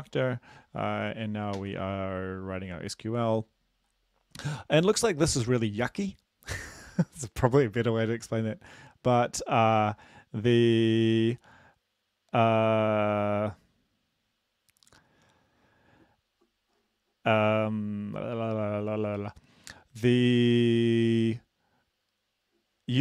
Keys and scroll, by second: 1.6 ctrl+s.